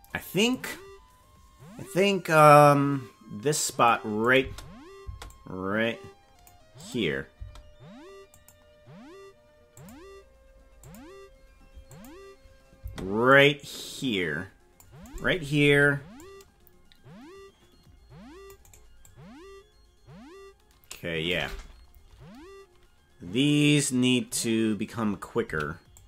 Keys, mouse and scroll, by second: 0.0 click, 2.4-3.9 drag, 4.2 click, 4.4 space, 5.0 space, 5.3-6.5 drag, 6.8 click, 7.3 space, 8.3 click, 9.8 click, 10.9 click, 11.9 click, 12.8 space, 13.3-14.8 drag, 15.0 right click, 15.6 c, 19.0-21.2 drag, 25.4 c.